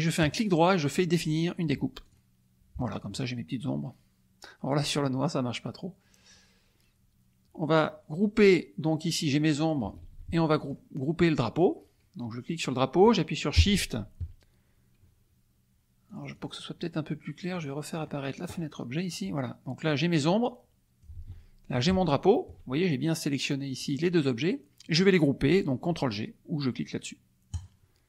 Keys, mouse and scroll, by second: 0.2 right click, 2.0 click, 8.8-9.8 drag, 10.0 ctrl+z, 10.5 ctrl+click, 16.1 click, 17.5 click, 18.0 click, 20.0-21.2 drag, 21.1 ctrl+z, 22.0 shift+click, 27.5 click.